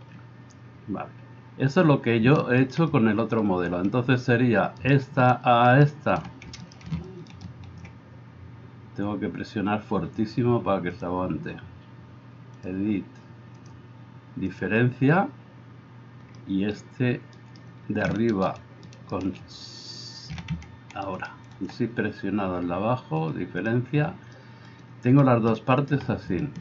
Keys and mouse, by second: 4.8-6.0 middle drag, 4.8-6.0 right drag, 6.6 middle click, 6.6 right click, 7.3 shift+middle click, 7.3 shift+right click, 11.1-13.6 middle drag, 13.6-26.6 drag, 17.4 middle click, 17.4 right click, 18.9 middle click, 18.9 right click, 21.1 shift+middle click, 21.1 shift+right click.